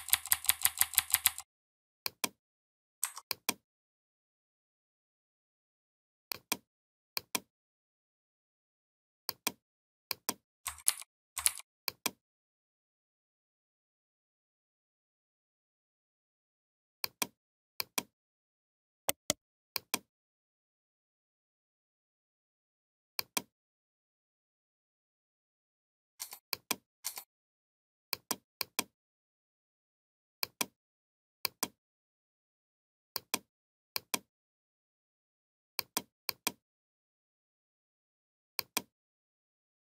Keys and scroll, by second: 10.7 ctrl+g, 11.3 ctrl+g.